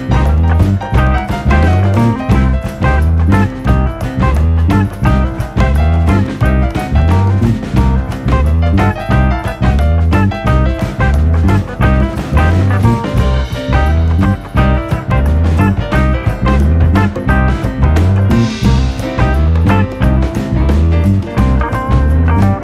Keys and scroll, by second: 4.9-6.1 scroll, 6.3 ctrl+v, 6.5 u, 17.1 ctrl+v, 17.4 u, 18.1 alt+[, 20.5 ctrl+v.